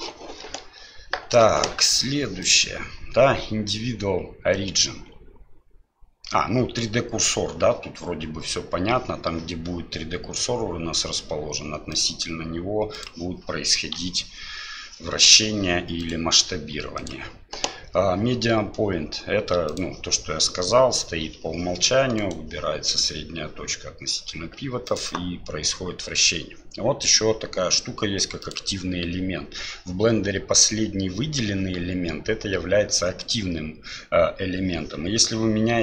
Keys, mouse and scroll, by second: 2.5-9.0 drag, 11.9-13.1 drag, 14.0 r, 17.0-19.8 drag, 21.2 r, 24.9-28.5 drag.